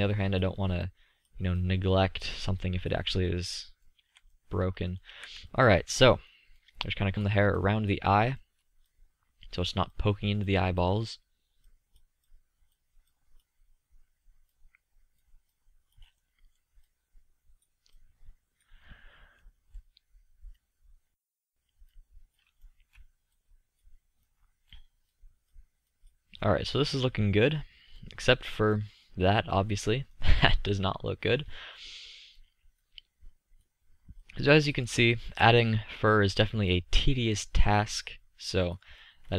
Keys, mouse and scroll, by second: 4.0-4.4 middle drag, 4.4 z, 5.5 z, 7.1 middle click, 7.7 click, 8.5 drag, 8.9-13.3 drag, 14.6-20.0 drag, 20.0-21.4 middle drag, 24.7-25.1 middle drag, 25.1 click, 29.9-30.3 middle drag, 30.9 middle drag, 32.3-32.7 middle drag, 33.3-34.1 middle drag, 34.1-35.9 drag, 37.1-38.6 drag.